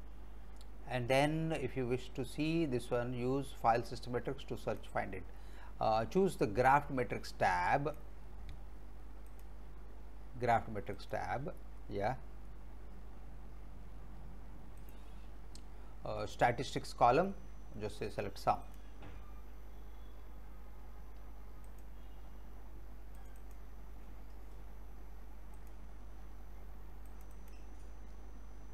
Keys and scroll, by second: 11.4 typing.